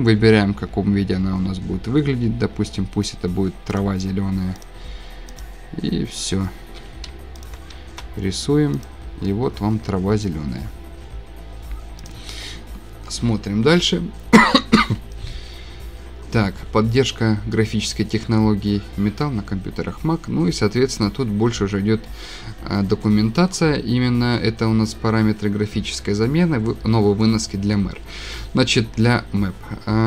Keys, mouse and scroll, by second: 2.2 click, 2.2 click, 2.4 click, 3.8 click, 3.8 scroll down 3, 4.6 click, 5.4 click, 5.6 scroll, 6.2 click, 7.5 shift+click, 8.9 click, 9.2 click, 9.3-9.9 scroll, 10.6-11.0 scroll, 12.1 click, 12.5 scroll down 11, 12.8 scroll down 1, 14.0 scroll up 3, 14.4 scroll, 15.3 scroll, 16.1 scroll, 19.3 scroll, 20.7 scroll, 22.0-22.5 scroll, 23.2-23.6 scroll, 25.5 scroll, 26.6 scroll.